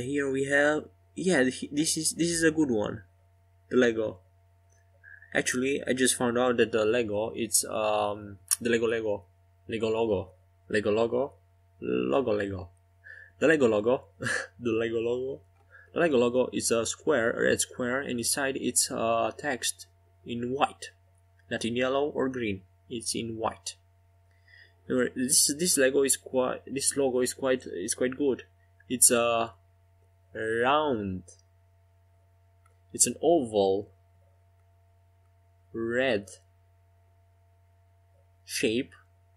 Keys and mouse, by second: 3.0 s, 9.6 Tab, 12.7 Tab, 16.0 shift+click, 18.6-23.4 right drag, 22.1 click, 23.4-31.6 drag, 31.6 Tab, 36.3 Tab.